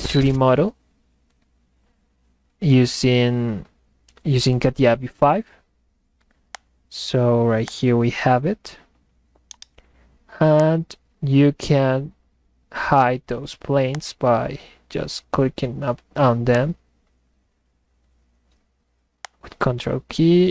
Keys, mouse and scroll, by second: 6.5 click, 7.7 click, 9.0 middle click, 9.4 middle click, 9.5 right click, 10.0 middle click, 10.6 click, 14.0 click, 16.6 click, 19.2 ctrl+click.